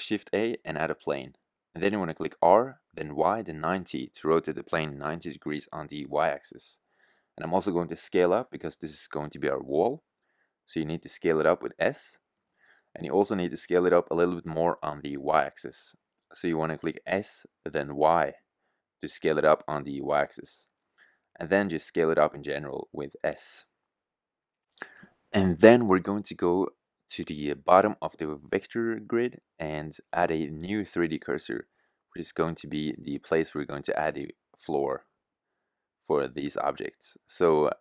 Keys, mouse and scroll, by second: 2.5 r, 6.6-8.7 middle drag, 9.0 s, 11.5-11.9 middle drag, 13.4 g, 17.6 click, 18.7 s, 21.0 middle click, 21.8 s, 25.5-26.1 drag, 32.9-34.0 middle drag, 36.4 shift+a.